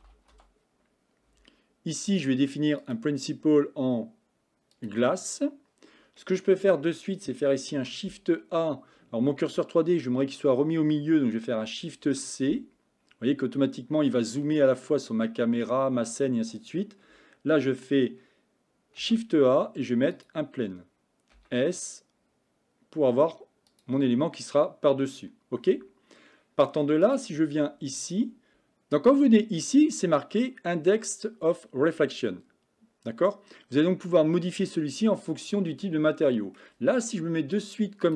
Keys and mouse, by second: 2.8-4.9 drag, 6.2 middle click, 7.8 shift+a, 12.1 shift+c, 19.0 shift+a, 21.4 s, 27.1 click, 35.7 middle click.